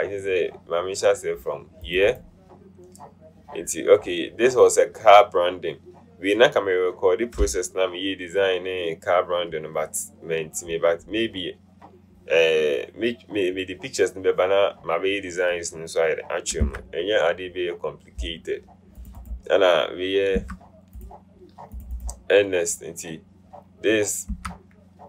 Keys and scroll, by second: 16.9 BackSpace, 20.6 BackSpace, 24.5 BackSpace.